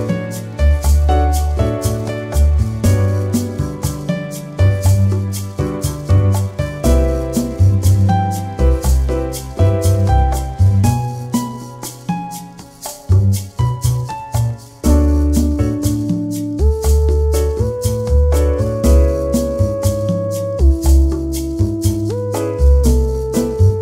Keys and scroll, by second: 9.8 Return, 11.2 Return, 16.8 space.